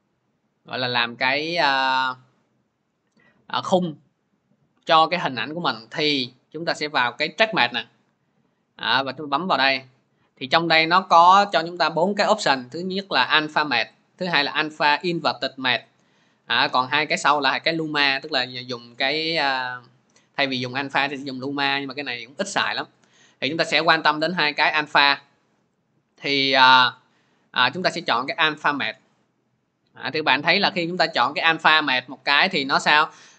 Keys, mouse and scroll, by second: 5.2 click, 7.1-14.2 drag, 28.8-33.3 drag.